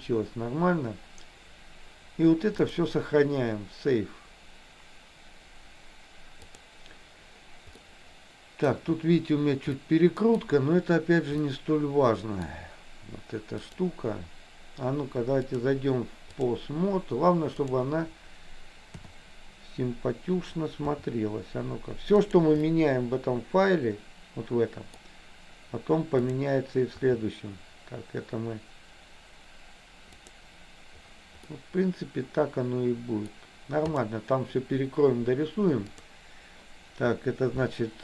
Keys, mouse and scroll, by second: 2.7-6.7 drag, 8.0 middle click, 9.9 middle click, 11.6-12.6 middle drag, 13.7 click, 15.6-16.7 drag, 17.7 click, 19.1 KP_7, 21.1 r, 22.8-25.1 middle drag, 26.3 click, 27.1 r, 31.6-33.5 middle drag, 35.9 click.